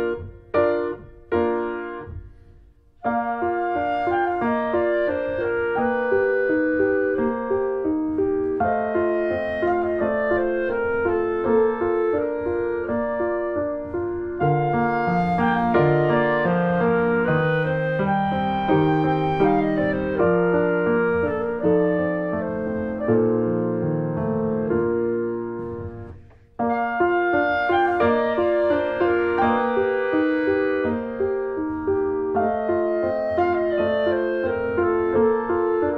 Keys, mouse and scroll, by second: 0.0 right click, 0.3 scroll down 3, 0.4 middle click, 1.1 click, 1.3 middle click, 1.8 click, 2.0 middle click, 3.4-6.0 middle drag, 6.0 ctrl+s, 6.5-7.5 drag, 7.5 BackSpace, 8.4 middle click, 8.9 shift+d, 9.6 click, 10.0-11.0 drag, 11.0 middle click, 11.7 click, 13.2 click, 13.3 middle click, 13.7-14.7 drag, 14.8 click, 15.1 scroll down 1, 15.2 middle click, 15.7-16.1 scroll up 1, 16.1 click, 16.3-17.7 shift+middle drag, 17.7 click, 17.9 middle click, 18.1 scroll down 4, 18.3 middle click, 18.5-18.9 scroll up 1, 19.0 shift+middle click, 19.3-20.1 scroll up 1, 20.1-21.8 middle drag, 21.8-22.1 scroll up 1, 22.1-23.1 shift+middle drag, 23.1 click, 23.3 middle click, 24.3-25.6 drag, 25.6 middle click, 25.7-27.2 scroll up 5, 25.9 shift+middle click, 26.6 middle click, 27.2-28.4 shift+middle drag, 28.4 click, 29.3 shift+middle click, 30.0 click, 30.5 middle click, 31.2 click, 32.1 middle click, 32.9 click, 33.1 middle click, 33.6 shift+click, 34.2-35.2 shift+middle drag, 35.2-35.9 drag.